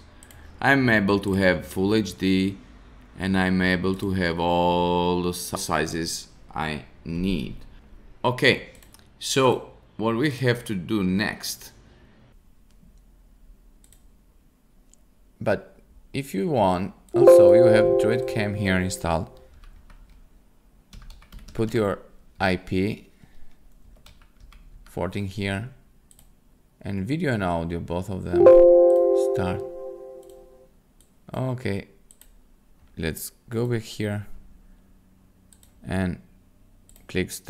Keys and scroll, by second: 19.2-22.3 typing, 23.5-25.2 typing.